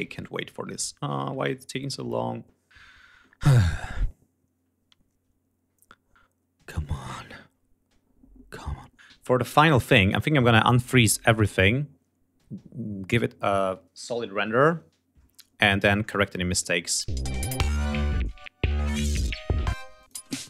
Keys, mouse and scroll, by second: 16.1 click, 16.6 space, 17.3 ctrl+scroll up 2, 18.0 ctrl+scroll down 2, 19.3 space, 19.6 click, 20.2 scroll down 1.